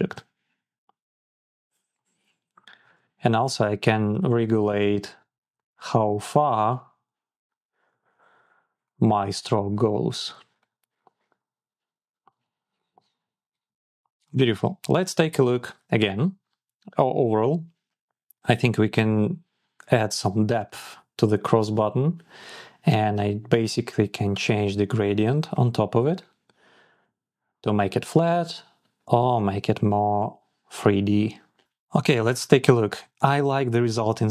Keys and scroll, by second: 3.7 shift+Up, 5.1 shift+Down, 5.7 shift+Down, 5.9 shift+Up, 6.5 shift+Down, 7.7 shift+Up, 8.3 shift+Up, 9.2 shift+Down, 9.6 shift+Up, 10.1 Down, 10.8 Down, 11.0 Up, 11.5 Up, 12.2 shift+Down, 12.7 shift+Down.